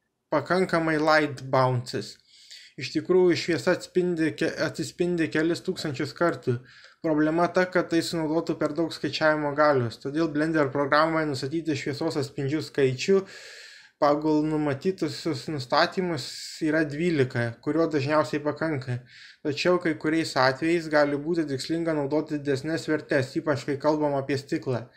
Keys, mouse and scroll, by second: 0.0-3.2 middle drag, 7.7-8.7 drag, 9.4 click, 10.9-12.0 drag, 13.8-16.6 drag, 19.3-21.3 middle drag.